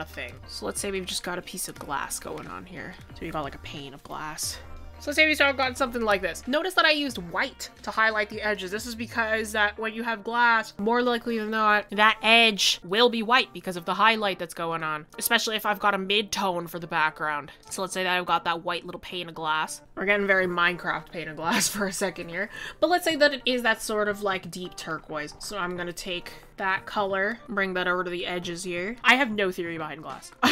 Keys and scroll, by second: 12.8 ctrl+z, 26.8 ctrl+z.